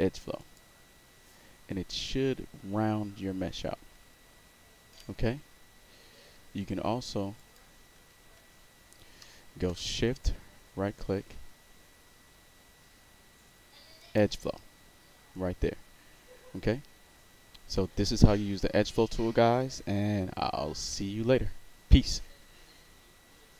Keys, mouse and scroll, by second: 0.3 click, 7.3 click, 7.9 z, 8.3 z, 10.2-14.1 shift+right drag, 23.5 click.